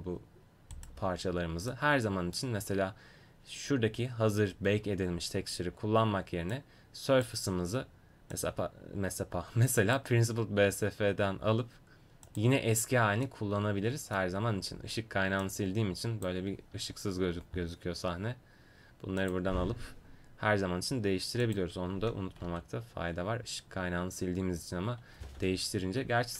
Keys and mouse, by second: 0.8-2.2 right drag, 2.2-6.5 middle drag, 6.5-10.9 drag, 12.2-17.2 drag, 19.2 click, 23.0 ctrl+z, 26.1 ctrl+z.